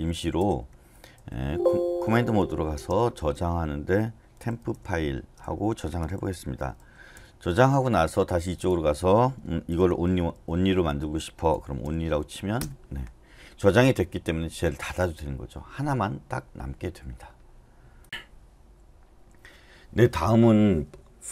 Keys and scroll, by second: 0.0-3.0 typing, 1.4 Escape, 4.1-7.3 typing, 9.5-12.0 typing, 12.6 Return.